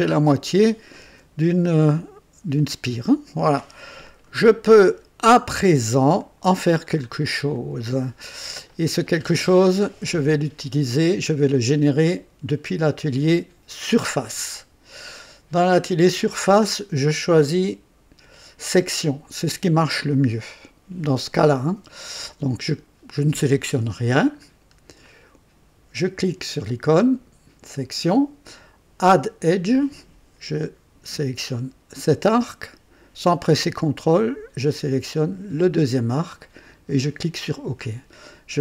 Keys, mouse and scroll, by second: 0.4 click, 0.8 typing, 1.8-2.4 right drag, 4.1 click, 5.1 typing, 5.3 click, 6.2 right click, 6.9-7.4 scroll up 1, 7.5-8.2 right drag, 8.4-9.8 drag, 12.0 click, 12.6 typing, 13.7-14.4 typing, 13.8 click, 24.3-24.8 scroll up 1, 25.0-25.8 right drag, 27.6 click, 29.5 click, 31.9 click, 35.2 click, 36.9 click.